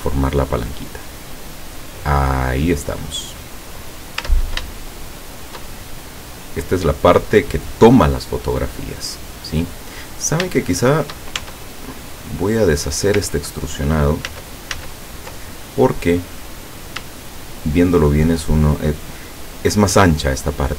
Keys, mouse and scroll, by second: 1.2 middle click, 2.2-2.6 scroll down 1, 2.6-2.9 scroll up 1, 2.9-4.2 middle drag, 4.2 Tab, 4.9 shift+middle click, 5.8 shift+scroll down 2, 7.1 middle click, 10.1-10.5 scroll up 3, 10.7 shift+middle click, 11.5 shift+Tab, 12.1 scroll up 2, 12.2 middle click, 14.3 ctrl+z, 16.5 click, 17.6 shift+right click.